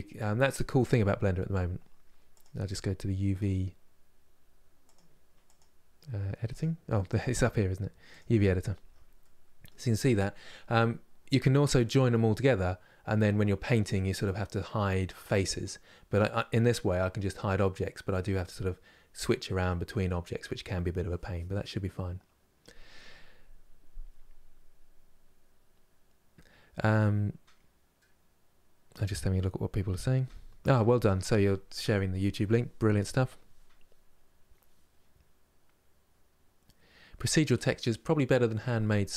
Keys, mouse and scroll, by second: 0.7-9.9 scroll down 1, 9.9-39.1 scroll down 1.